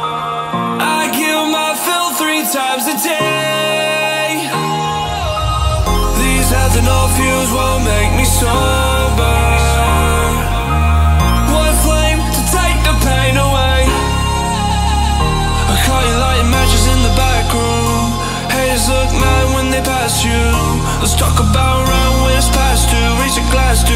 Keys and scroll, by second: 15.9 alt+a, 23.4 alt+a.